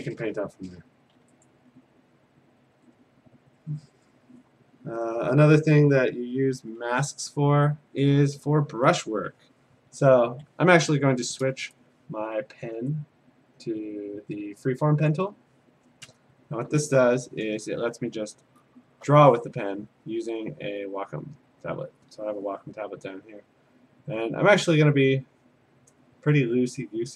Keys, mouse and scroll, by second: 1.5 click, 2.8 a, 4.2 click, 9.4 p, 15.1-17.1 drag, 18.1-19.0 alt+scroll, 22.4 click, 25.5 click.